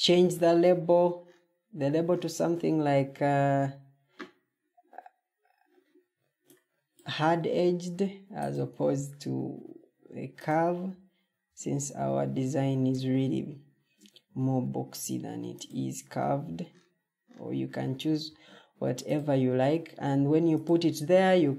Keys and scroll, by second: 18.1 ctrl+d, 20.9 Escape.